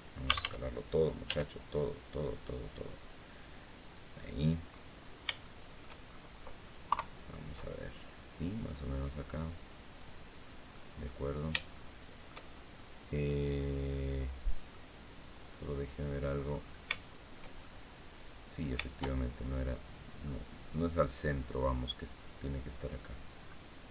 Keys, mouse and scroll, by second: 0.0 a, 1.0 s, 2.4 click, 3.5 click, 4.5 middle click, 5.0 shift+click, 5.8-6.2 shift+scroll up 1, 6.6 KP_3, 8.8-9.9 drag, 10.2 scroll down 2, 10.5-12.2 middle drag, 12.5-14.6 shift+middle drag, 15.8 click, 16.3-16.7 scroll up 3, 16.7 shift+middle click, 17.4-18.7 shift+middle drag, 18.9 shift+scroll down 2, 19.2 middle click, 20.4-22.7 drag, 23.1 scroll up 2.